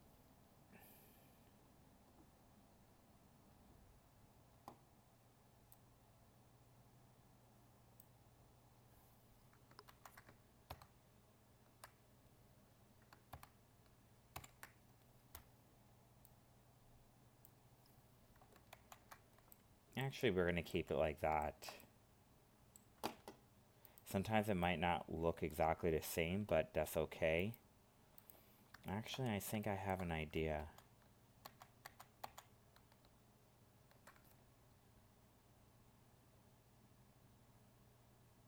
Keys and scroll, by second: 9.9 ctrl+z, 14.3 ctrl+-, 18.7 ctrl+z, 30.5 ctrl+z.